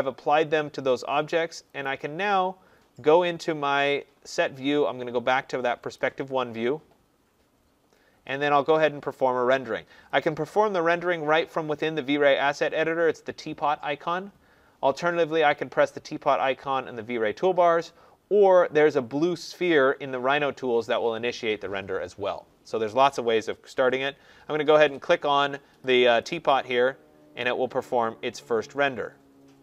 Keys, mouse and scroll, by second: 1.8 click, 5.9 click, 10.4 click, 13.6-15.6 drag, 26.1-29.6 drag.